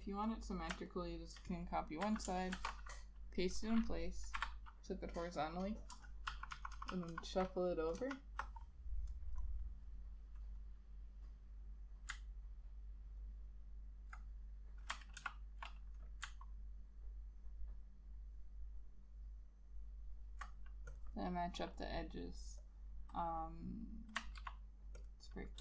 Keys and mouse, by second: 1.0 ctrl+click, 2.1 ctrl+c, 2.7 ctrl+shift+v, 4.5 1, 6.4 shift+Right, 6.6 shift+Right, 6.9 shift+Right, 7.1 shift+Right, 7.2 shift+Right, 8.1 shift+Left, 12.6 alt+click, 13.6 alt+click, 15.3 ctrl+h, 17.1 alt+click, 19.2 alt+click, 24.5 ctrl+b, 25.1 ctrl+click.